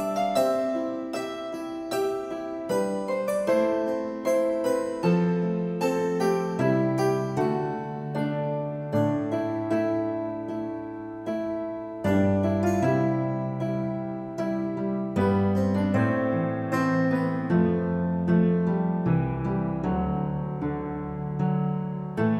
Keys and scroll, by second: 7.3 n, 7.8 e.